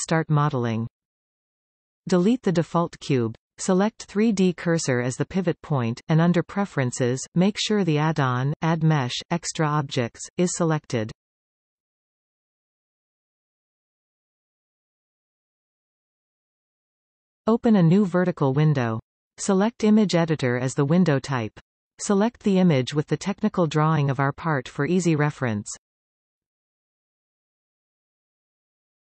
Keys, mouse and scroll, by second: 1.8 x, 4.9-10.8 drag, 18.8-26.3 drag.